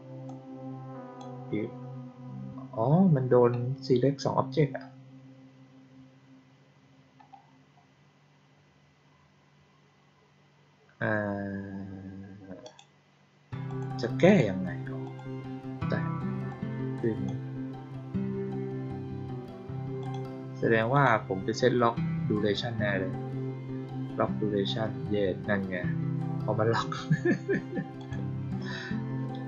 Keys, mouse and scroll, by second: 0.2-1.1 drag, 12.6 click, 13.6 click, 14.2 click, 15.0 click, 16.4-17.2 drag, 19.9 click, 20.9 click, 27.9 click.